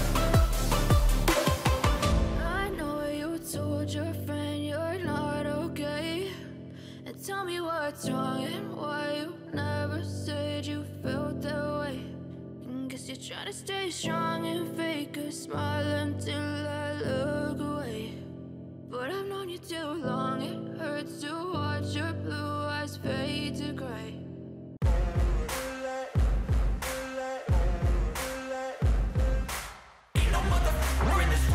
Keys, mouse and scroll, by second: 4.2-4.6 scroll down 4, 5.4 ctrl+=, 5.7 ctrl+=, 7.2-9.2 scroll down 30, 9.2-10.4 scroll up 2, 10.5 ctrl+=, 10.8 ctrl+=, 25.5-28.4 typing.